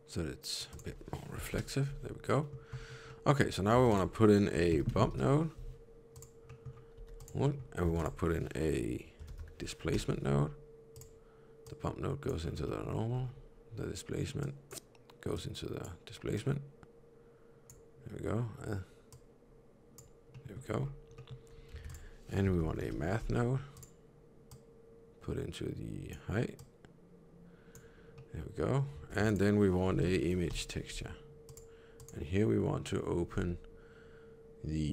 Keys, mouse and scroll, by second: 0.6 click, 2.3 middle click, 2.6-3.1 scroll down 4, 3.0 middle click, 3.3 scroll up 2, 3.7 shift+a, 6.3 middle click, 6.8 g, 7.3 middle click, 7.8 shift+a, 11.6 click, 12.3-13.1 scroll down 5, 12.6 middle click, 14.3 click, 15.2 click, 20.2 middle click, 20.7-21.2 scroll up 4, 21.1 middle click, 21.7 shift+a, 24.4 click, 26.4 click, 28.0 middle click, 29.0 shift+a, 31.9 click.